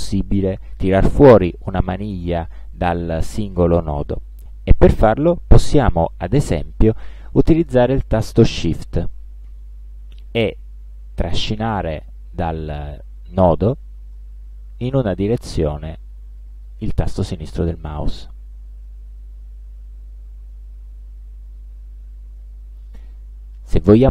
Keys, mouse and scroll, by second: 14.9-18.5 shift+drag.